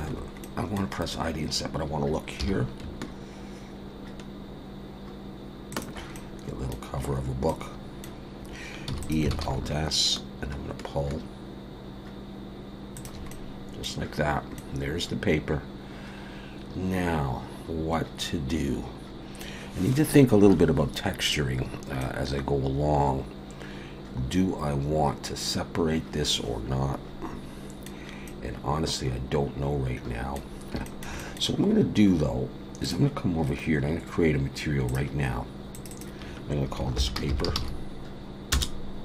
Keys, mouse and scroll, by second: 0.4 middle click, 1.0-1.5 scroll up 1, 2.4-2.9 scroll up 2, 2.4 i, 6.1 middle click, 7.0-7.5 scroll down 2, 7.5 middle click, 8.9 e, 9.3 alt+s, 13.3 middle click, 14.5 middle click, 21.6-22.0 scroll down 1, 22.0 middle click, 28.2 middle click, 30.8 shift+middle click, 31.2 middle click, 32.8 click, 34.9 click.